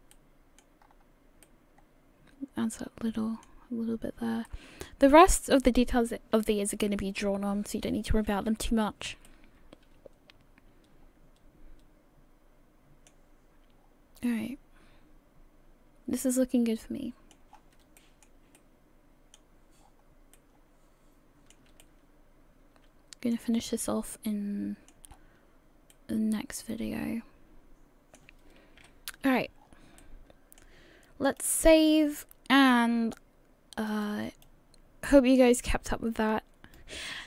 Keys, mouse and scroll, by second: 0.1 middle click, 0.8 scroll up 3, 1.4 middle click, 4.0-4.5 scroll down 2, 4.5 middle click, 7.4-8.0 scroll down 2, 8.5 a, 8.7-9.3 scroll down 1, 8.7 a, 9.3 middle click, 11.4 a, 13.8 scroll down 4, 14.3 middle click, 17.5-17.8 scroll up 5, 18.0 shift+middle click, 18.6 middle click, 19.8 scroll down 5, 20.4 middle click, 21.8 shift+middle click, 23.7 middle click, 25.1 scroll up 5, 25.9 middle click, 28.8 KP_1, 29.6-29.9 scroll down 6, 30.0 shift+middle click, 31.4 click.